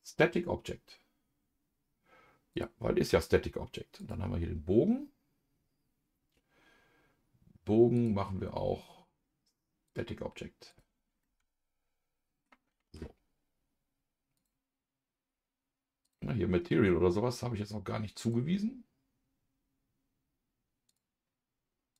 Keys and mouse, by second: 2.5 click, 4.0 click, 7.9-9.9 drag, 10.7 click, 11.2-12.4 middle drag, 14.3 click, 16.0 click, 18.2 click.